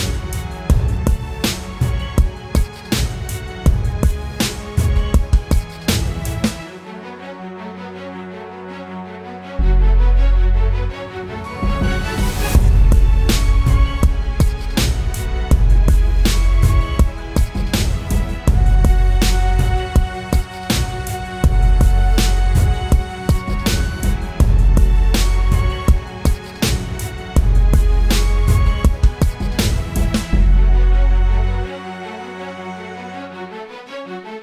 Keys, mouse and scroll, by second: 8.5-9.2 typing, 15.9 ctrl+-, 16.4 ctrl+-, 17.3 ctrl+-, 22.1 alt+scroll up 1.